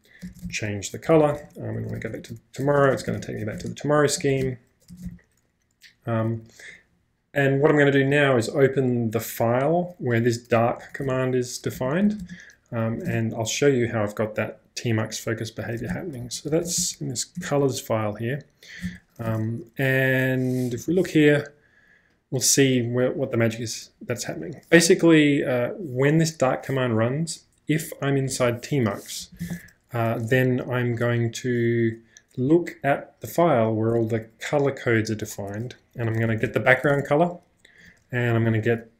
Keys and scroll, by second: 0.0-2.7 typing, 4.4 ctrl+j, 5.0 ctrl+space, 5.0 k, 10.4-12.9 typing, 11.8 ctrl+u, 12.3 Return, 13.1 Return, 15.7-17.4 typing, 18.5-21.4 typing, 28.3-30.3 typing, 28.4 Escape, 36.0 w, 36.1 w, 36.3 w, 36.4 w, 38.2 j.